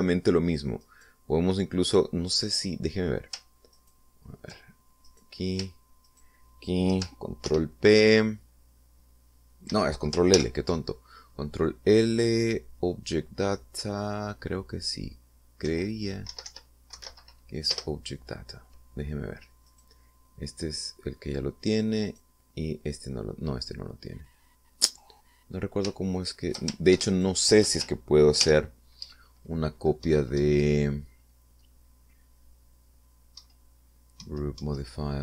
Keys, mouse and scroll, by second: 2.1 right click, 5.0 ctrl+right click, 6.3 right click, 7.3 shift+right click, 8.7 ctrl+p, 10.9 Escape, 11.6 ctrl+l, 16.9 Down, 17.5 Up, 17.7 Right, 18.1 Left, 18.3 Down, 19.0 Return, 20.9 right click, 22.0 right click, 23.4 right click, 28.4 ctrl+shift+click, 29.6 ctrl+l, 31.3 Down, 34.6 Down.